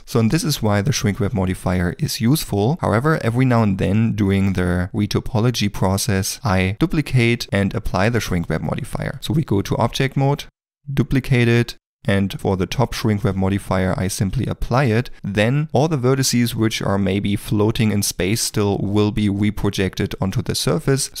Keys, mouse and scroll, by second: 8.9 ctrl+middle click, 9.0 shift+middle click, 9.3 Tab, 15.1 Tab, 18.3 ctrl+middle click, 18.8 middle click.